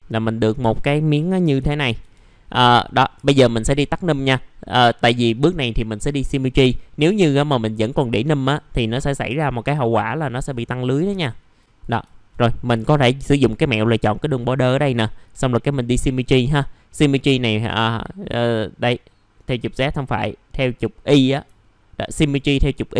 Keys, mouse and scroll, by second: 2.4-2.7 scroll down 1, 2.7 middle click, 3.1 F4, 3.7 click, 4.3 middle click, 11.1 3, 11.6 click, 12.1 alt+middle click, 15.2 click, 19.5 click, 21.6 alt+middle click.